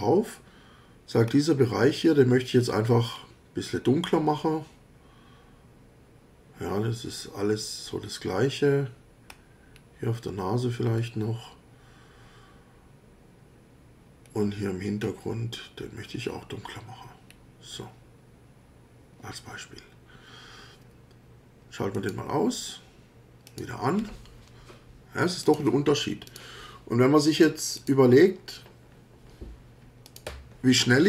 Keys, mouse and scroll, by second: 1.3 scroll up 2, 2.0 scroll down 1, 3.1 scroll down 2, 9.1 scroll up 2, 9.7 scroll down 2, 11.0 scroll down 2, 14.2 scroll down 2, 15.0 scroll down 2, 17.3 scroll down 2, 21.9 click, 23.5 click, 25.4 click, 26.2 click, 27.8 click, 30.1 click.